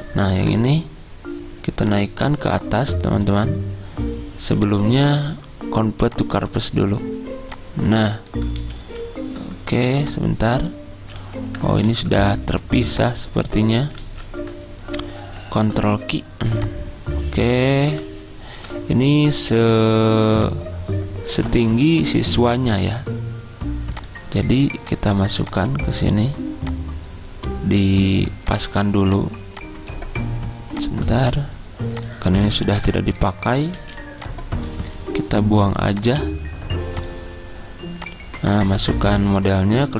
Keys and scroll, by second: 8.7 ctrl+z, 8.9 ctrl+z, 11.3 ctrl+z, 12.0 ctrl+z, 14.2 ctrl+z, 15.9 ctrl+q, 32.9 Delete, 33.9 z.